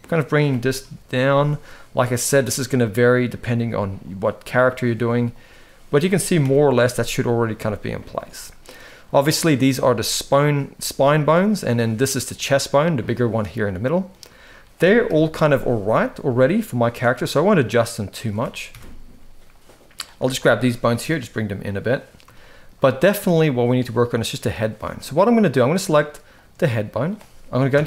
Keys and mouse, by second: 0.6 KP_3, 1.5 shift+middle click, 3.3 g, 4.4 click, 4.6 g, 6.1 KP_1, 7.3 shift+middle click, 8.7 click, 9.8 shift+middle click, 11.6 click, 12.4-13.8 middle drag, 14.8 KP_3, 16.1 shift+middle click, 18.5 KP_1, 19.2 click, 20.0 shift+middle click, 20.5 g, 22.1 shift+middle click, 27.5 KP_3.